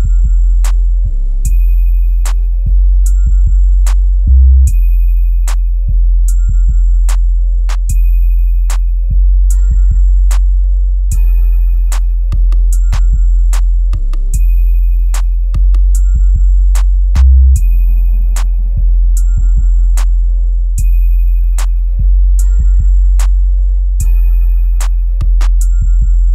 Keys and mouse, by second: 0.7-3.0 middle drag, 3.4 middle click, 4.9 click, 5.2 click, 5.8 middle click, 7.3 click, 7.9 middle click, 8.8-10.3 middle drag, 11.0 Tab, 12.1 a, 13.0 Tab, 13.5-14.4 middle drag, 14.6 click, 14.8-16.2 middle drag, 16.6-16.9 middle drag, 17.6 click, 18.7-20.0 middle drag, 20.3 Tab, 21.5 click, 23.9 alt+h, 24.6 click, 25.5 Delete, 25.8-26.1 middle drag.